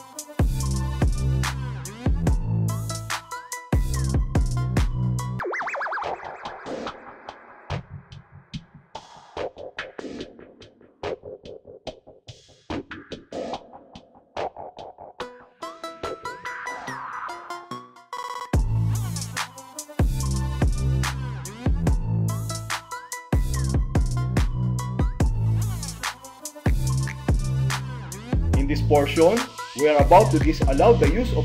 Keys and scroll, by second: 0.9 space, 4.5 space, 8.0 alt+d, 9.6 alt+a, 11.4 super+r, 13.3 Return, 15.4 BackSpace, 17.2 space, 19.1 alt+F4, 21.1 alt+c, 22.5 alt+a, 23.5 Return.